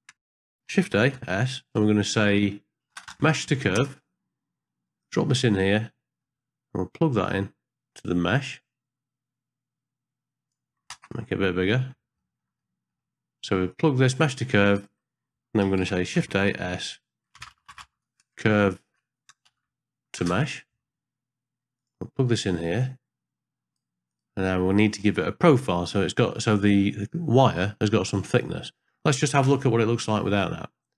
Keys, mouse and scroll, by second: 0.0 click, 1.0 shift+a, 5.9 middle click, 7.2-10.5 drag, 11.0 ctrl+space, 11.6 ctrl+middle click, 12.2 ctrl+middle click, 12.6 middle click, 13.7 click, 14.7 click, 15.7 shift+a, 22.8 click, 29.5 ctrl+space.